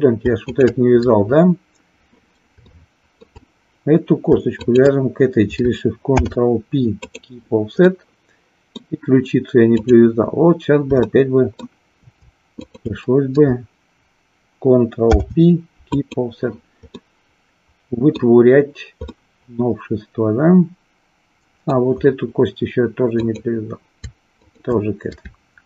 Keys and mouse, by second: 0.4 shift+click, 2.8 shift+middle click, 4.6 shift+click, 6.1 ctrl+p, 7.9 middle click, 9.8 click, 11.1 shift+middle click, 12.5 shift+click, 15.0 ctrl+p, 17.0-18.1 middle drag, 19.1-21.9 middle drag, 23.2 click, 24.2 shift+click.